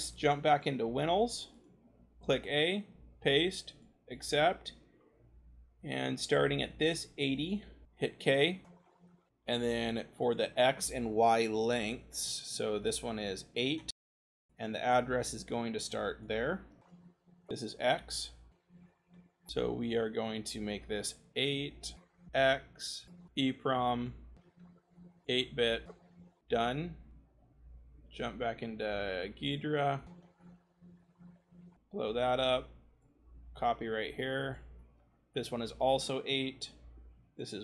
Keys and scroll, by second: 0.5 ctrl+c, 1.7 c, 2.2 a, 2.8 ctrl+v, 7.8 k, 18.1 c, 21.2 8, 24.4 ctrl+v, 25.8 v.